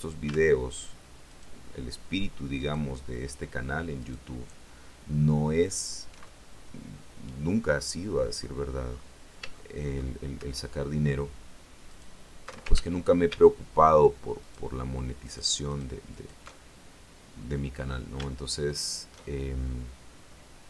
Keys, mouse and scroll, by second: 1.2 alt+shift+right click, 2.5 alt+shift+right click, 3.9 alt+shift+right click, 6.2-8.2 alt+shift+middle drag, 8.2-9.0 scroll up 4, 9.4 shift+middle click, 11.8 alt+shift+right click, 12.6 ctrl+alt+shift+z, 14.3 alt+shift+right click, 15.1 alt+shift+right click, 15.6 alt+shift+right click, 16.0 alt+shift+right click, 16.4-18.0 alt+shift+middle drag, 18.6 alt+shift+right click, 19.1-20.6 alt+shift+middle drag.